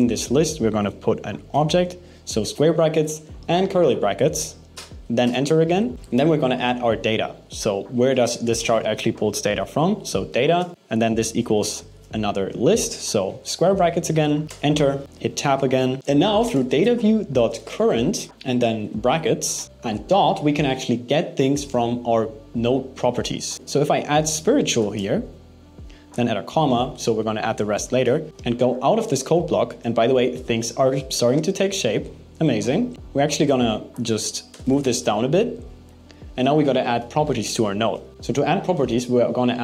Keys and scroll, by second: 0.1 alt+7, 0.5 BackSpace, 1.2 alt+8, 10.7 alt+7, 11.0 BackSpace, 11.2 alt+8, 11.6 BackSpace, 12.2 alt+5, 16.0 BackSpace.